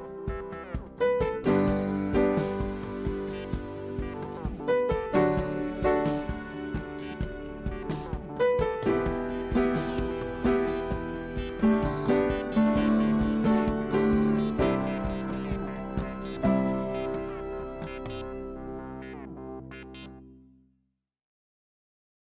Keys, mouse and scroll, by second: 0.4 s, 2.8 shift+click, 5.2 Right, 8.6 right click, 17.3 click, 17.6 click, 20.3 ctrl+g, 21.5 shift+click.